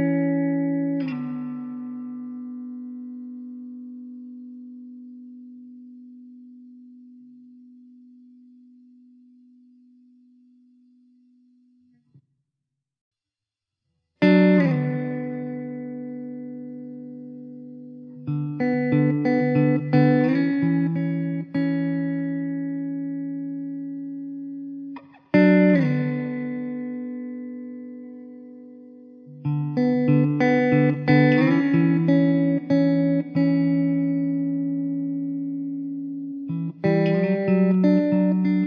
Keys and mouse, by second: 1.3 1, 9.0 2, 16.3 middle click, 18.4-19.1 typing, 25.0 1, 30.8 alt+w, 31.7 alt+middle click, 34.8 alt+w, 36.0 alt+w, 36.9 middle click.